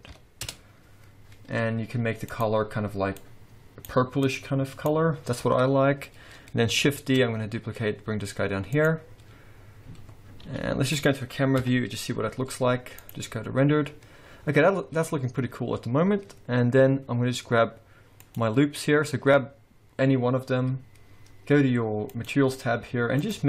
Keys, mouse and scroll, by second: 2.3 click, 6.6-6.9 scroll down 1, 7.0 shift+d, 9.1-9.5 scroll down 4, 9.5-10.4 scroll up 3, 10.4 g, 11.6 KP_0, 12.3 z, 13.8-14.5 scroll up 2, 15.2-16.6 scroll up 2, 18.2 click, 22.0 click, 23.2 click.